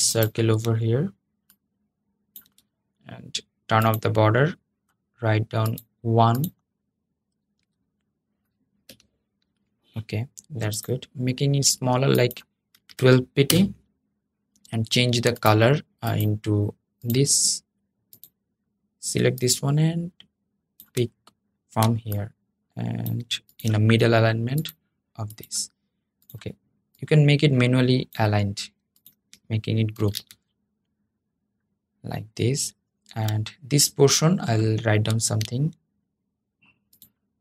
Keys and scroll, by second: 29.7 super+g.